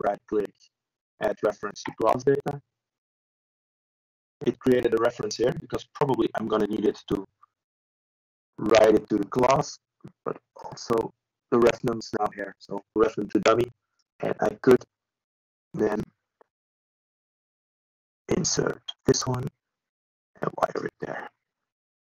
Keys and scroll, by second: 14.2 ctrl+e.